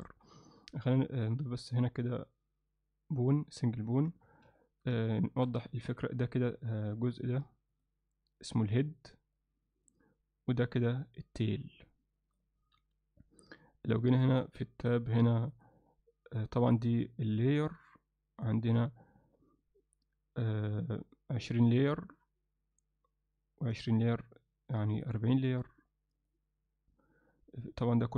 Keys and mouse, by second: 4.1 Tab, 4.6 ctrl+alt+middle click, 5.2 shift+middle click, 5.7 ctrl+alt+middle click, 7.7 click, 8.5 click, 9.4 click, 10.8-12.4 drag, 12.8 n, 15.6 drag, 16.7 drag, 25.0 click, 26.2 click.